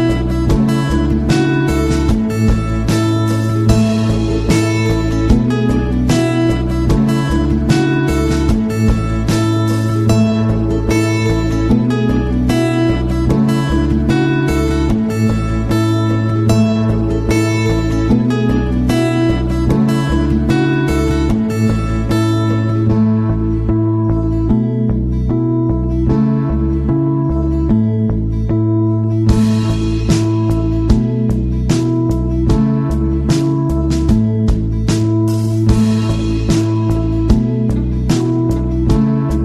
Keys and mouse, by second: 3.0 Tab, 4.1 right click, 5.0 ctrl+l, 7.8 Tab, 8.4 middle click, 9.2 middle click, 11.7 middle click, 12.6 shift+middle click, 13.2 middle click, 19.1-19.5 middle drag, 19.6 middle drag, 33.5 middle drag, 34.1 middle click, 38.9-39.3 middle drag.